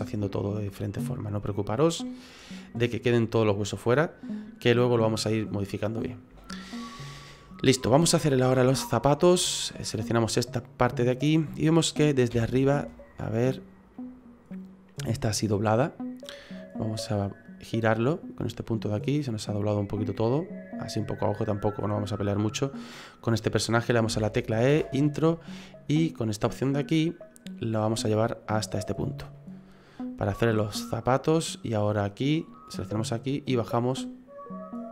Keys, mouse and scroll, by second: 2.8 middle click, 6.5 shift+middle click, 7.1-7.5 scroll up 2, 7.5 middle click, 7.8 middle click, 8.1 shift+middle click, 8.3 middle click, 8.4 shift+middle click, 8.7-9.1 scroll up 5, 9.1 middle click, 9.7 right click, 10.2 middle click, 12.3 KP_7, 13.9 middle click, 16.6 click, 18.1 click, 21.9 middle click, 24.1 e, 25.8 click, 27.8 click, 29.3 middle click, 31.6 click, 32.7 right click, 33.5 click.